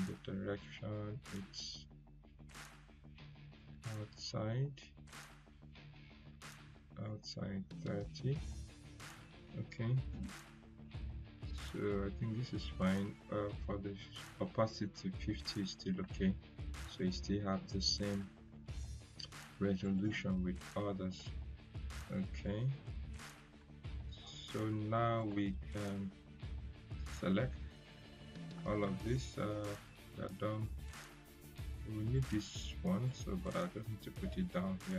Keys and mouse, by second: 3.5 click, 3.5 click, 19.8 click, 22.4 click, 23.5 ctrl+z, 24.8 click, 25.1 right click, 26.3 click, 28.7 right click, 29.8-32.7 drag.